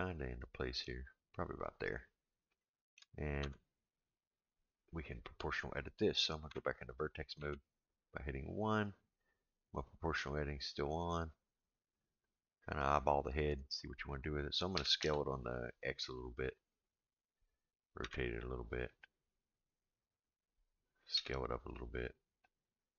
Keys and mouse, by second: 2.6-3.0 shift+middle drag, 3.4 Tab, 6.5 1, 6.5 2, 7.4 1, 14.7 s, 18.0 r, 21.1 s.